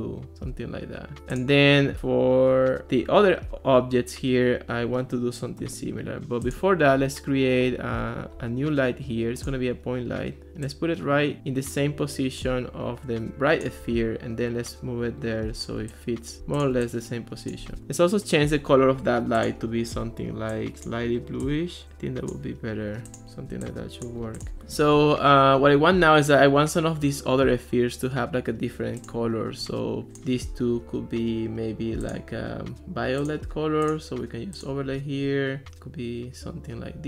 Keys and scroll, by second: 17.8 alt+r.